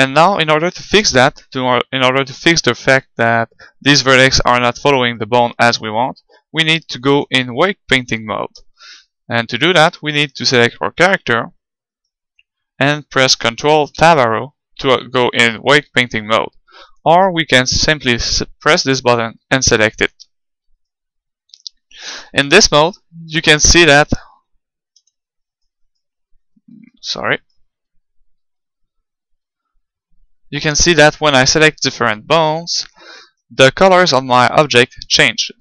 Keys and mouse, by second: 7.0-9.0 middle drag, 10.1-11.7 right drag, 11.9-13.7 right drag, 13.9 ctrl+Tab, 16.9-20.5 drag, 20.9-22.4 right drag, 22.4 middle click, 23.2 right click, 23.9 click, 24.0 middle click, 24.1 click, 24.1 right click, 24.9 click, 25.1 middle click, 26.5 click, 28.5 middle click, 29.1 middle click, 29.5-30.6 middle drag, 31.0-35.6 right drag.